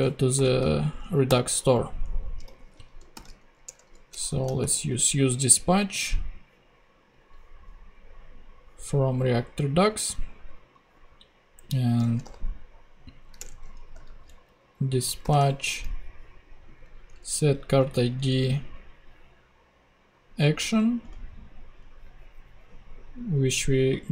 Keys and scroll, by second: 0.3-5.5 typing, 3.6 shift+Return, 11.9 d, 12.2 i, 13.4 Return, 13.9 shift+Return, 15.2 shift+9, 17.1 alt+Return, 18.0 alt+Down.